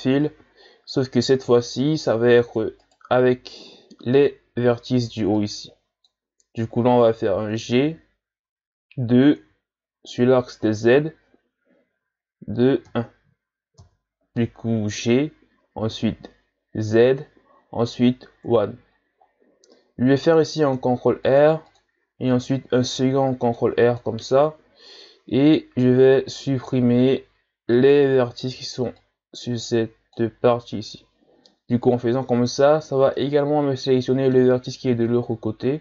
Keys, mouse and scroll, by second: 0.7-1.3 ctrl+scroll up 1, 1.5-2.6 shift+scroll up 2, 2.9 right click, 3.8 z, 5.0 b, 7.8 g, 20.6 ctrl+r, 22.8 ctrl+r, 27.8 right click, 28.6 b, 32.3-33.2 shift+scroll up 3, 33.2-35.8 middle drag.